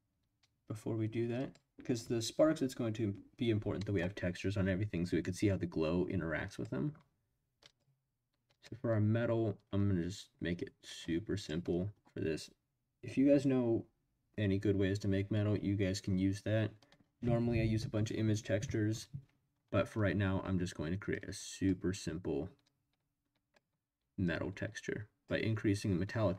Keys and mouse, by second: 1.3 click, 3.8 middle drag, 6.5 click, 7.6 click, 8.5 click, 10.9 click, 21.2 click, 22.6 click, 24.3 click.